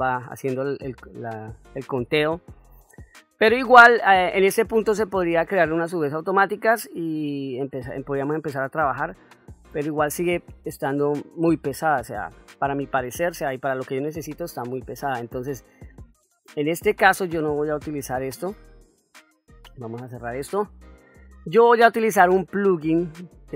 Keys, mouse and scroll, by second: 1.8-2.7 middle drag, 3.9-4.5 ctrl+middle drag, 4.8 ctrl+middle click, 6.5-7.2 middle drag, 7.9-8.3 middle drag, 14.4-14.9 middle drag, 18.9 click, 20.1 middle click.